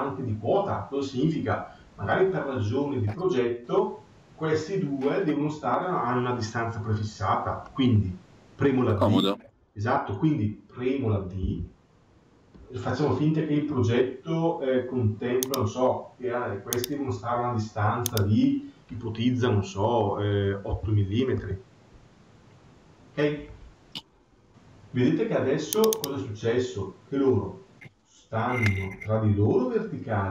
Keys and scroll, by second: 21.3 Return.